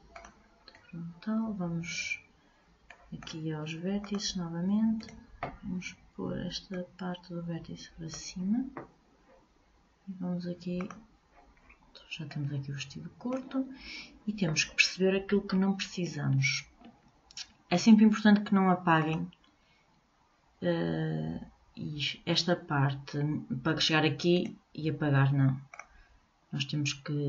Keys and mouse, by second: 3.1-4.2 middle drag, 4.2-5.9 drag, 5.2-6.8 right drag, 7.0-8.6 drag, 10.9-12.5 drag, 12.5-17.5 middle drag, 19.2-21.1 drag, 24.5-26.3 right drag.